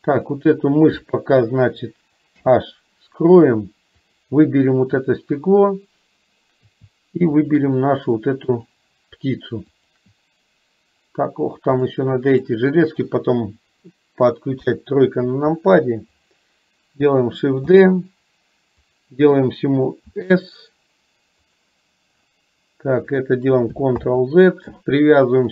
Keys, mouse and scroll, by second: 0.2 click, 2.4 h, 4.1 click, 7.4 shift+click, 8.6 click, 9.8 shift+click, 11.9-12.6 middle drag, 14.7 KP_3, 17.7 shift+d, 20.2 s, 24.1 ctrl+z.